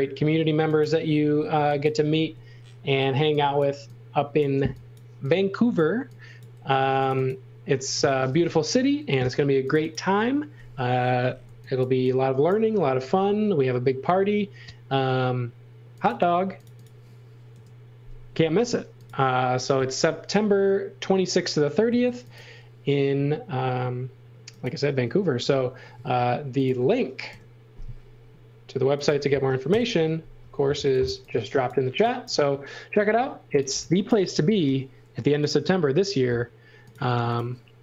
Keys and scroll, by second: 1.5 x, 2.2 space, 3.2 e, 6.6 f, 8.3 super+z, 11.4 x, 11.8 v, 13.0 space, 17.5 Delete, 19.8 m, 25.9 space, 27.3 Delete, 29.7 Delete, 30.8 x, 31.1 v, 33.3-34.6 typing, 37.1 space.